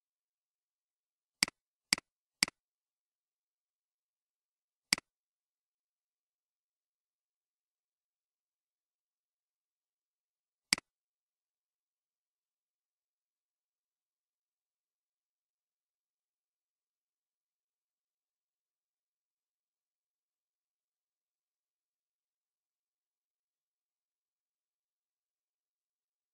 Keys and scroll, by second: 3.3 3, 3.5 Return.